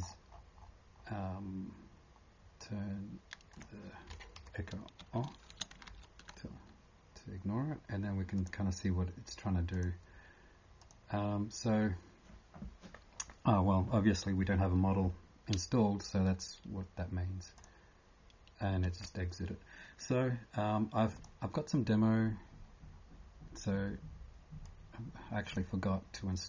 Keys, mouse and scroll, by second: 0.0-0.4 scroll up 10, 1.0 scroll down 1, 3.5 click, 3.5 scroll down 7, 4.4 Home, 5.3 shift+3, 8.4 click, 9.7 click, 21.1 click.